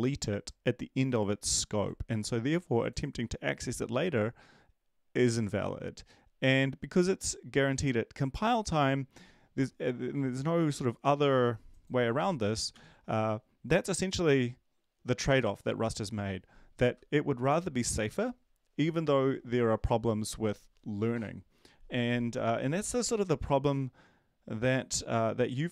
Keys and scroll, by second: 12.7 ctrl+s.